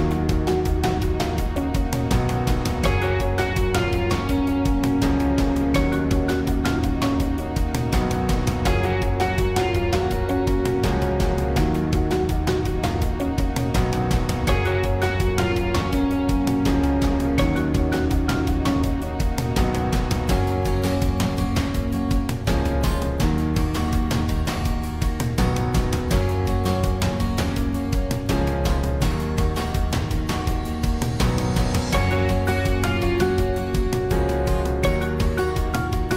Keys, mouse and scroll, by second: 1.2 ctrl+r, 5.9 click, 6.4-7.4 middle drag, 7.4 click, 9.2 right click, 9.9 right click, 10.3-11.4 right drag, 11.6 right click, 12.4 KP_1, 12.6 KP_1, 14.0 z, 14.8 z, 15.3 z, 16.4 b, 18.3 x, 20.5-22.3 drag, 22.7 click, 22.7 x, 24.4 z, 25.2 middle click, 28.0 e, 30.6 click, 31.4 right click, 31.6 click, 32.6 s, 33.7 click, 34.4 click, 35.0 click.